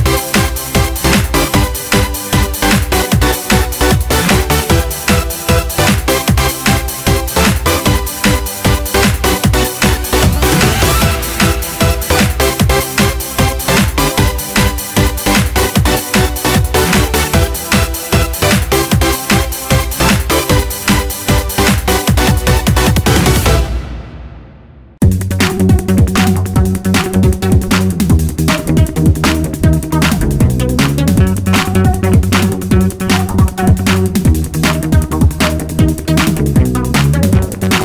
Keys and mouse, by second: 0.9-1.9 drag, 1.9 middle click, 4.2-6.1 drag, 6.4 click, 12.1 click, 14.1 click, 15.2 click, 18.0 n, 18.8-19.6 drag, 20.7 click, 22.2 click, 23.9 Delete, 27.1 shift+a, 36.9 click.